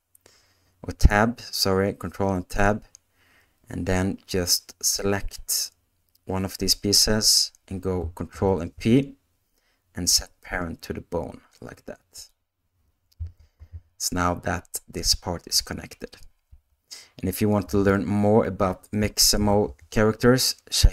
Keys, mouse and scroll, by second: 8.3 ctrl+p, 13.4 ctrl+Tab, 16.5 space, 17.7 space, 19.4 shift+Left.